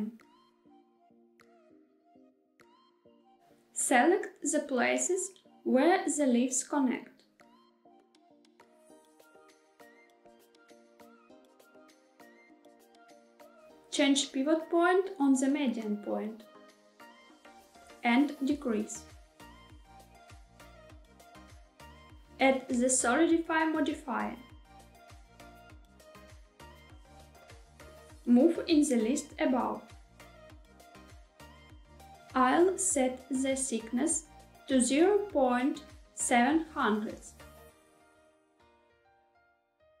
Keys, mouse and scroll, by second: 2.8 click, 3.8 click, 5.3 shift+click, 7.0 middle click, 7.6 shift+click, 8.0 middle click, 8.6 shift+click, 8.8 middle click, 9.3 shift+click, 9.5 shift+middle click, 10.0 middle click, 10.5 shift+click, 10.7 shift+click, 10.9 middle click, 11.3 shift+middle click, 11.7 shift+click, 14.8-17.2 drag, 18.4 s, 21.1 click, 21.8 middle click, 22.3 click, 24.4-27.3 drag, 30.0-31.3 drag, 33.1-40.0 drag.